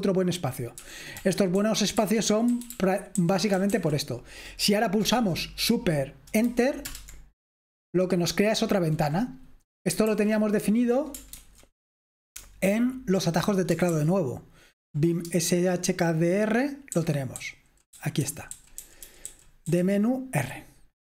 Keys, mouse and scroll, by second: 0.0-21.2 typing, 0.0 click, 6.9 super+Return, 10.2 super+h, 11.4 ctrl+c, 13.9 ctrl+p, 15.3 Return.